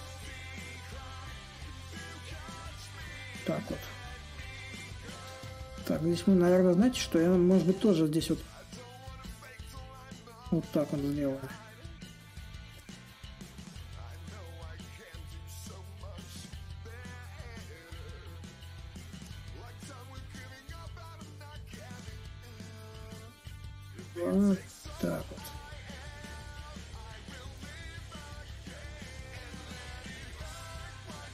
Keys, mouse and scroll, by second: 5.7-10.8 drag, 11.1-16.2 drag, 16.2-21.3 drag, 22.2-25.4 drag, 26.2-31.3 drag.